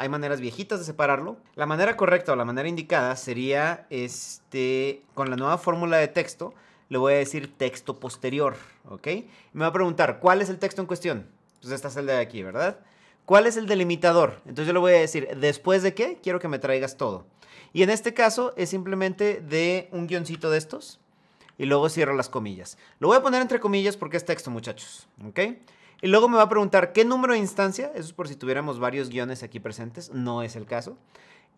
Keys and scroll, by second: 6.9 Down, 7.4 Down, 7.7 Tab.